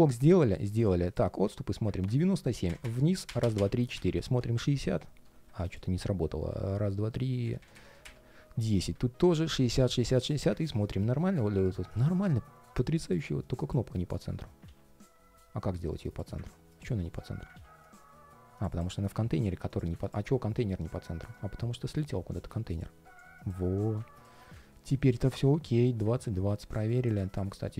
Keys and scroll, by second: 13.7 alt+h, 14.4 super+z, 16.7 alt+h, 20.5 ctrl+shift+4, 22.8 alt+h, 27.4 ctrl+shift+3.